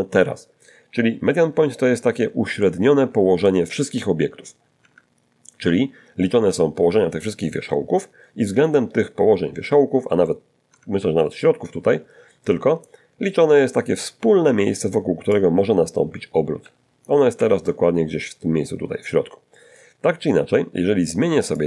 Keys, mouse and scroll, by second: 0.8-1.8 middle drag, 3.1 Tab, 8.9 Tab, 13.6-16.0 drag, 15.6 Escape, 19.8 click.